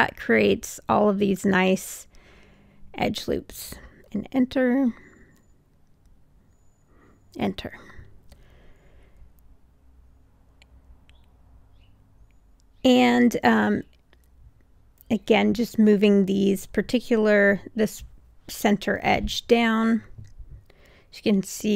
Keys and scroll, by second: 3.9 Return, 7.4 Return, 19.3 w.